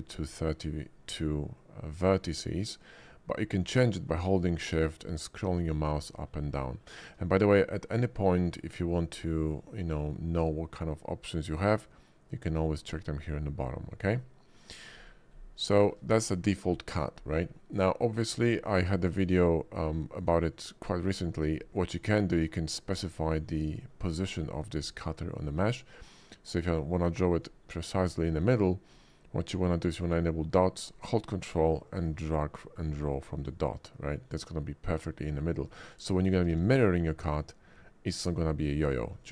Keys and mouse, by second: 14.8 click, 15.8 shift+middle click, 24.2 middle click, 25.3 middle click, 26.7-27.4 drag, 28.0 click, 30.0 click, 31.9 ctrl+click, 33.4 click, 34.4-35.7 drag, 36.2 click, 36.5 alt+x, 39.2 ctrl+z.